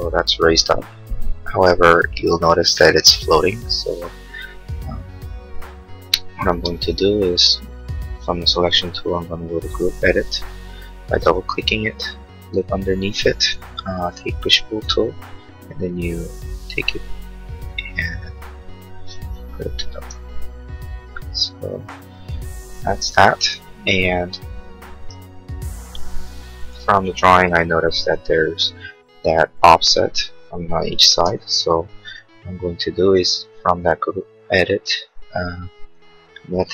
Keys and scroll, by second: 6.4 space, 10.6 Escape, 14.0 p, 19.8 space, 21.8 Escape, 27.1 h, 31.3 shift+u.